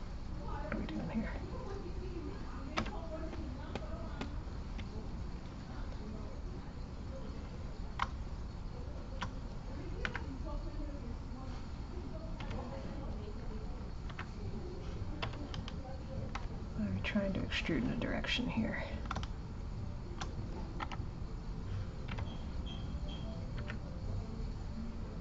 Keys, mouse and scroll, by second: 1.6 click, 2.7 Escape, 4.2 click, 4.7 click, 6.4 click, 8.5 shift+click, 10.0 e, 16.4 click, 17.7 click, 20.8 g.